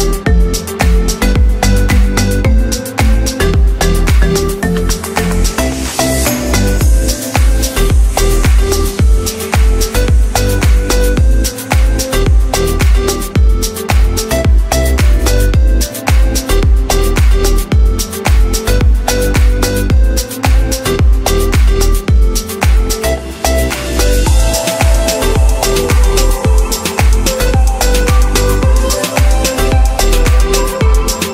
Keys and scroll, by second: 4.2-6.8 typing, 8.5-11.2 typing, 23.9 space.